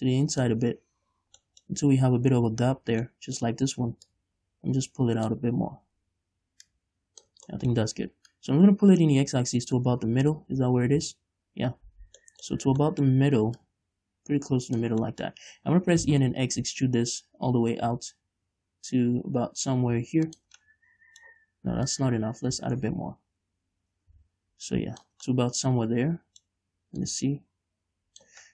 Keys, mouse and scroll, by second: 1.1-1.4 scroll down 2, 1.4-1.8 scroll up 2, 1.8-4.5 middle drag, 4.5-7.9 drag, 7.9 middle click, 8.7-12.6 drag, 10.5-12.3 scroll down 1, 12.3 scroll up 1, 12.6-14.0 middle drag, 12.9 scroll up 1, 13.0 scroll down 1, 14.0-15.4 drag, 15.4-20.8 middle drag, 16.2 e, 20.8 shift+click, 21.0-22.2 middle drag, 22.2-25.7 drag, 25.7-27.4 middle drag, 27.4-28.5 drag.